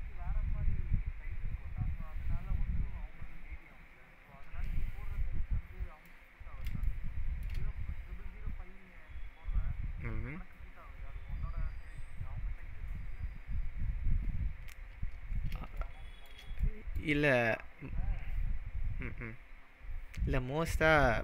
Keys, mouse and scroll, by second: 5.7-6.1 scroll down 2, 6.1-6.6 middle drag, 15.8-16.3 shift+middle drag.